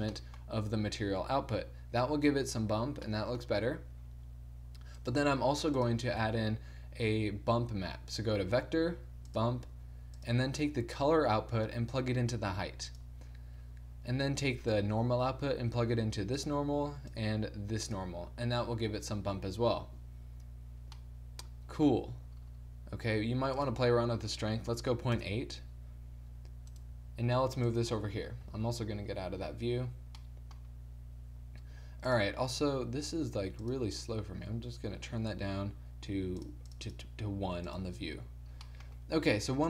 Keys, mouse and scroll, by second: 3.2-6.1 drag, 5.5 g, 6.7 shift+a, 11.0-12.8 drag, 15.1-16.7 middle drag, 16.7-19.3 drag, 23.7-25.4 drag, 27.0 right click, 27.2 g, 28.6 z, 28.8 z, 36.4-37.7 drag, 39.5-39.6 drag, 39.5 g.